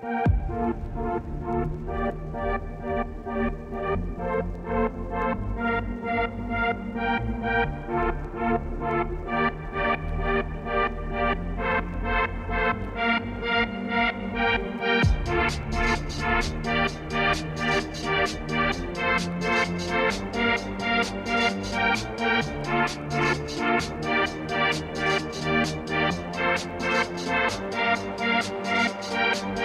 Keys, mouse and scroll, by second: 3.4 ctrl+shift+t, 7.0 middle click, 8.0 scroll, 8.2 scroll down 1, 8.4-10.4 middle drag, 10.4 2, 10.5 alt+Left, 11.2 alt+click, 14.5 Tab, 14.7 middle click, 15.5 scroll down 1, 15.6-16.0 scroll up 5, 16.0 scroll down 3, 18.4-21.4 drag, 21.4 middle click, 22.2-23.0 scroll down 1, 23.0 scroll down 4, 23.2-24.4 middle drag, 24.4-24.9 scroll up 2, 24.9-26.4 drag, 28.4 ctrl+shift+t.